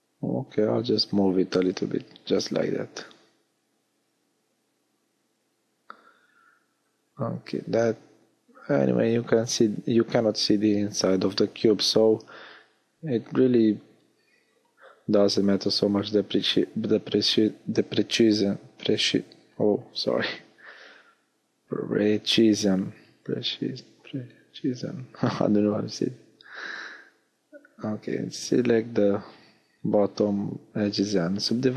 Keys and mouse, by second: 10.8 middle click, 11.6 middle click, 14.6-20.4 middle drag, 25.8 w, 26.9 middle click, 28.0 w.